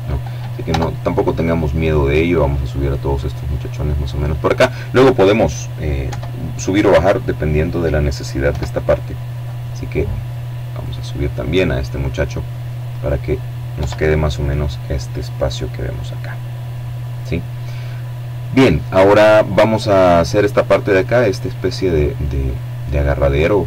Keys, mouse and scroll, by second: 0.0 right click, 0.7-3.2 drag, 4.7 KP_7, 7.1 KP_7, 7.8 middle click, 8.5 click, 10.1-12.2 drag, 12.5 KP_7, 14.2-15.3 scroll up 2.